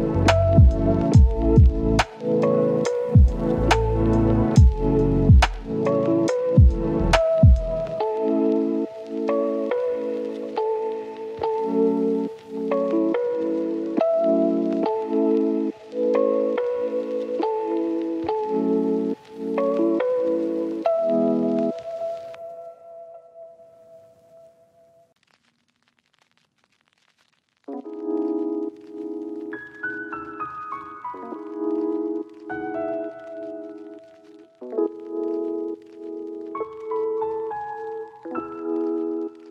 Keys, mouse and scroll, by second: 0.0 right click, 0.3 scroll up 1, 0.6-6.9 drag, 7.1 scroll down 1, 7.2-8.1 scroll up 1, 9.4 click, 9.6 right click, 9.8 scroll down 1, 10.0 scroll up 1, 10.0 right click, 10.8 scroll down 1, 10.8-11.7 scroll up 3, 10.9 right click, 11.3 right click, 11.7 click, 12.7 scroll down 1, 12.8 scroll up 1, 13.2 click, 13.9 right click, 14.4 click, 14.6 scroll down 1, 14.7-15.1 scroll up 1, 15.1 right click, 15.6 click, 18.7 right click, 20.4 scroll up 1, 20.6 click, 22.4 right click, 22.9 click, 23.1 right click, 23.6 click, 23.7 right click, 24.0 scroll down 1, 24.1 scroll up 1, 24.2 right click, 24.9-25.4 scroll up 1, 25.9 click, 26.6 right click, 27.3 scroll down 1, 27.4 scroll up 1, 27.5 right click, 28.8 scroll down 1, 28.9 scroll up 1, 29.0 right click, 29.4 scroll down 1, 29.5 scroll up 1, 29.7 right click, 30.3 click, 30.5 scroll down 1, 30.9 scroll up 1, 31.2 click, 32.6-33.1 scroll up 1, 33.1 click, 33.2-34.3 scroll down 1, 34.3 click, 34.7 right click, 35.2 click, 35.4 right click, 35.9 scroll up 1, 36.1-37.9 right drag, 38.6 click, 38.8 scroll down 1, 38.9-39.5 scroll up 1.